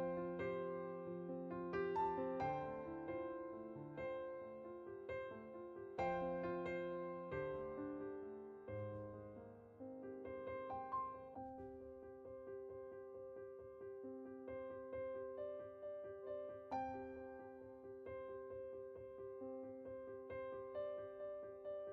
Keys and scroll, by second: 18.5 0.